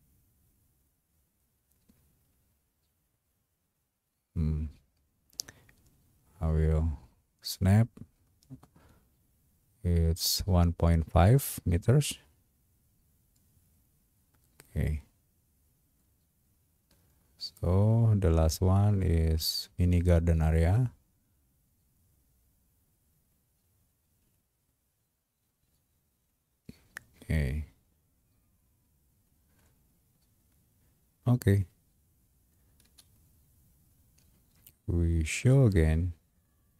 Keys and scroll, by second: 32.9 space.